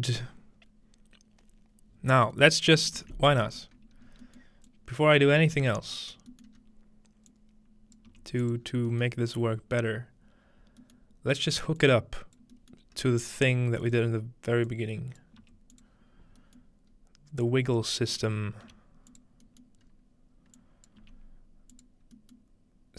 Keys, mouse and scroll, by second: 2.1-3.7 scroll down 1, 2.4 middle click, 3.7-4.2 scroll up 1, 4.7-6.9 drag, 5.4-5.9 scroll up 1, 5.6 g, 6.1-6.6 scroll down 1, 6.6 scroll up 1, 7.3 click, 8.1 g, 8.4 click, 9.4-10.8 scroll down 1, 10.8-11.8 scroll down 1, 11.8 click, 12.9-14.4 scroll up 2, 13.3 g, 13.8 click, 14.7-15.4 drag, 15.4 g, 15.7 click, 16.1-17.9 scroll up 1, 16.6-18.1 middle drag, 17.9-19.5 scroll down 1, 18.3 middle click, 18.7 typing, 19.5-21.9 scroll up 1, 20.6 click, 21.0 g, 21.5-22.8 drag.